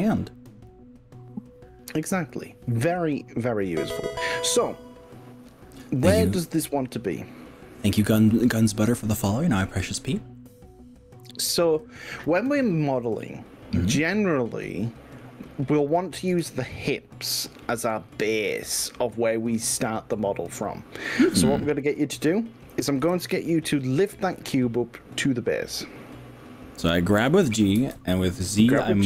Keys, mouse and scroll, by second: 6.2 click, 7.6-10.2 middle drag, 12.6-15.6 middle drag, 16.4 KP_1, 23.0 g, 27.8 z.